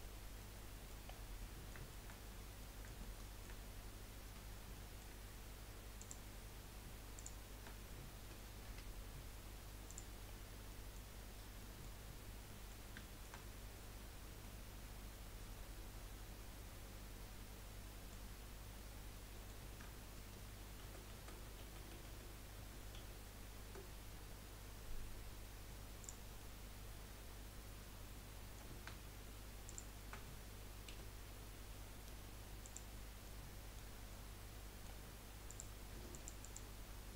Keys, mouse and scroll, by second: 0.4 middle click, 1.0 scroll up 1, 1.2 scroll down 5, 1.4 middle click, 2.3-2.6 scroll up 3, 2.6-4.0 middle drag, 4.0-4.5 scroll up 4, 4.7 shift+middle click, 5.2 scroll up 1, 6.0 click, 7.2 shift+click, 10.0 F3, 10.3-10.7 scroll down 3, 10.7 middle click, 11.3 scroll down 1, 11.6 middle click, 12.0-12.5 scroll down 4, 12.5-13.5 middle drag, 13.5-14.4 scroll up 4, 14.4-17.5 middle drag, 18.7-19.0 scroll down 1, 19.0-20.8 middle drag, 20.8 ctrl+z, 21.5 ctrl+z, 21.8 ctrl+z, 22.0 ctrl+z, 22.6 ctrl+z, 23.0 ctrl+z, 26.0 click, 26.4-29.7 middle drag, 29.7 shift+click, 30.9 Delete, 33.2-35.5 middle drag, 35.5 click, 36.4 alt+shift+click.